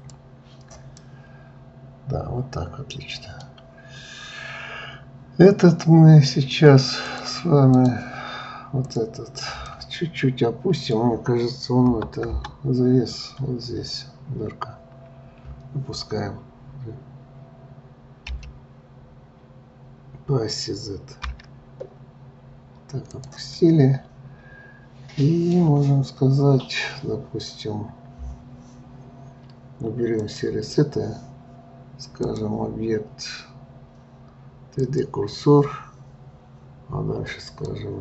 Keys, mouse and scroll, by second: 1.0-4.0 middle drag, 7.1-8.9 drag, 9.7-11.9 middle drag, 11.9 KP_Enter, 12.2 KP_Add, 13.2-13.6 scroll up 1, 18.3 g, 23.5-25.5 middle drag, 25.5 scroll up 1, 30.2-35.2 drag, 37.4 click.